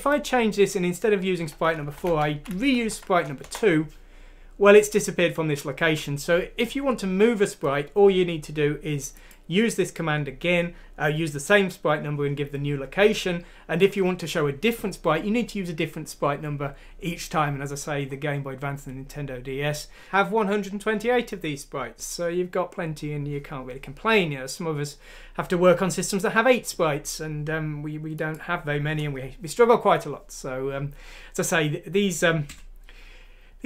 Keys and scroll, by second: 1.9 BackSpace, 2.0 BackSpace, 2.9 F6, 3.4 Return, 20.4 F6, 21.6 shift+Return.